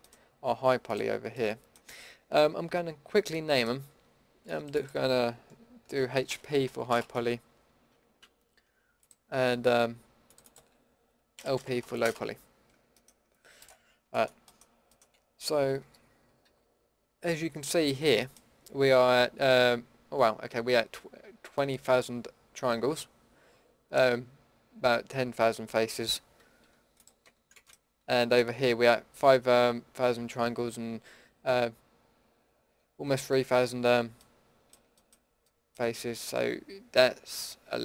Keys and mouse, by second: 0.9-6.9 middle drag, 13.6-14.6 middle drag, 15.4 Tab, 15.8 a, 16.4 a, 26.6 Tab, 27.2 Tab, 36.9 Tab, 37.3 Tab.